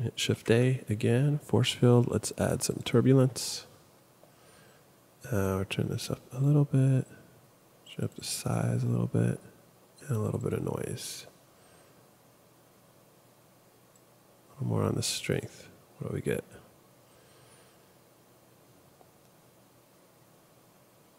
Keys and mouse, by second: 0.3 shift+a.